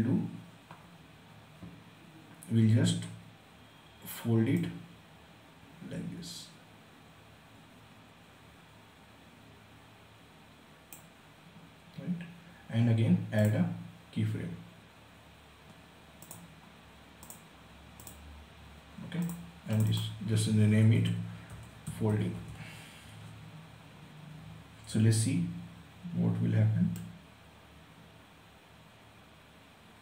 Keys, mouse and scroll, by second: 4.1-12.9 drag, 13.0 click, 15.8 click, 20.3-22.6 typing, 26.5-30.0 drag.